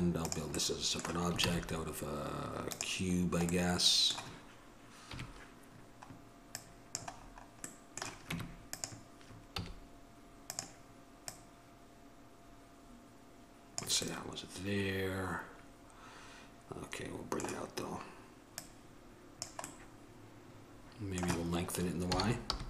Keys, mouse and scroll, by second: 0.0 Tab, 1.6 shift+a, 5.2 KP_Decimal, 7.9 middle click, 8.0 click, 8.5 Tab, 9.8 s, 11.6 click, 14.2 middle click, 14.8 middle click, 14.9 middle click, 16.4 middle click, 17.1-20.6 middle drag.